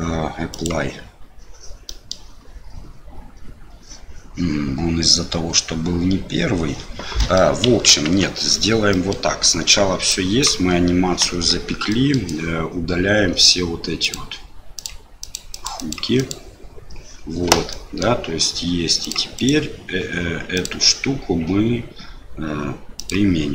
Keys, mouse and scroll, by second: 1.9 middle click, 7.2 middle click, 7.9 ctrl+z, 8.9 middle click, 10.2 click, 11.3 Delete, 11.9 middle click, 14.0 click, 14.8 click, 15.3 click, 15.6 click, 16.2 click, 17.7 middle click, 19.0 click, 19.4 click, 20.5-23.5 drag.